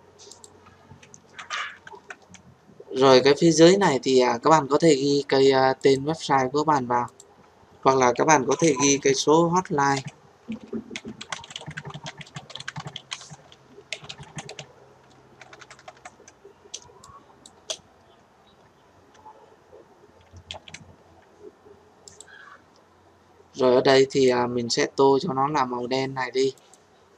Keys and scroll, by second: 20.5 ctrl+z.